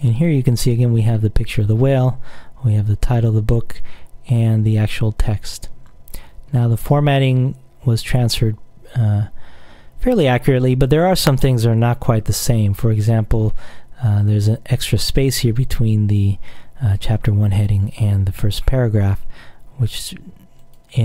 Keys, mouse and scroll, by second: 2.9-3.5 scroll down 1, 3.5-4.1 scroll up 1, 4.1-4.7 scroll down 1, 6.6-7.3 scroll down 1, 7.3-8.1 scroll up 1, 8.1-8.5 scroll up 1, 20.8 click.